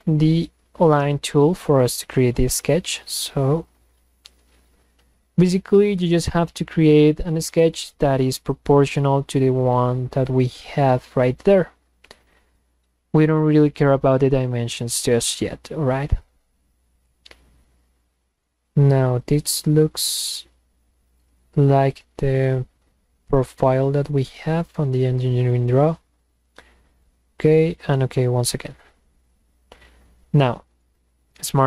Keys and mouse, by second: 0.0 click, 3.6 click, 6.8 click, 8.4 click, 10.2 click, 12.2 click, 14.0 click, 16.2 click, 19.1 click, 21.2 click, 27.0 click, 27.7 click, 30.9 click.